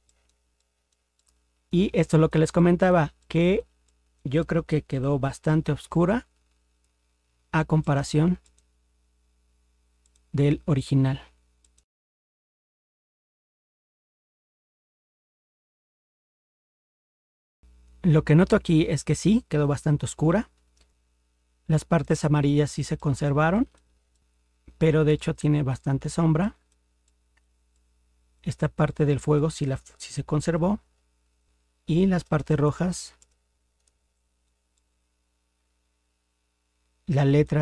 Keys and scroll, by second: 5.0 ctrl+0, 30.6 ctrl+0, 32.2 ctrl++.